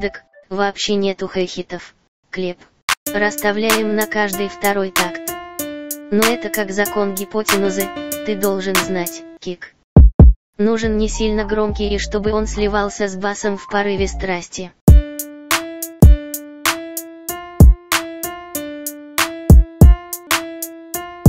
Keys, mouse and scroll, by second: 9.1 click.